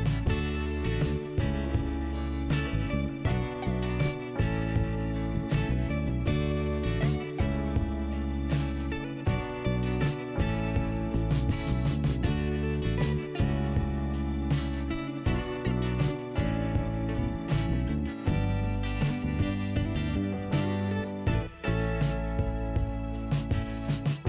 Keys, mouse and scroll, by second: 1.5 click, 5.8 t, 6.8 scroll up 2, 8.0 click, 8.1 click, 9.1 click, 9.2 click, 9.8 click, 15.5 click, 16.0 scroll down 2, 16.2 click, 18.0 p, 19.0 click, 20.7 scroll up 2, 21.5 scroll down 1, 21.6 scroll up 1, 21.7 scroll down 2, 23.4 click.